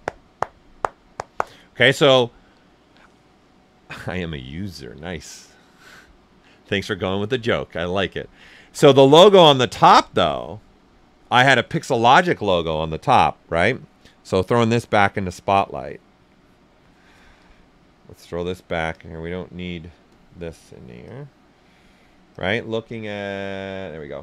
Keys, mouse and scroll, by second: 13.1 click, 17.3 click, 18.9 click, 20.0 click, 21.0-24.2 drag.